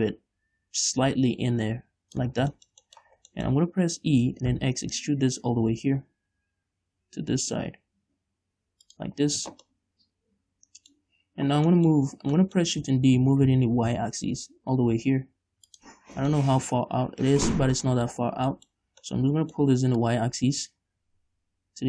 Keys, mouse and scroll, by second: 2.7 scroll down 1, 2.9 shift+middle click, 3.5 scroll down 3, 3.6-10.2 shift+middle drag, 4.6 e, 9.3 shift+click, 9.6 scroll down 1, 9.7 Tab, 11.4-11.8 scroll up 1, 12.1 middle click, 12.4 Tab, 12.7 middle click, 13.5 shift+d, 16.1 shift+click, 16.5 scroll down 1, 16.7 middle click, 18.2-20.4 middle drag, 18.5-18.9 scroll up 2, 19.1 scroll up 2, 20.4-21.8 drag.